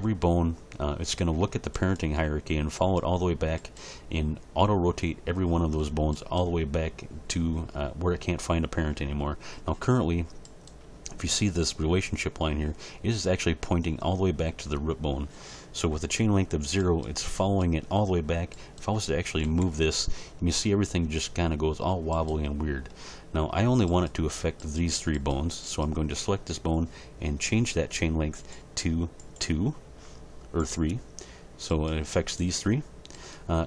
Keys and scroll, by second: 19.4 g.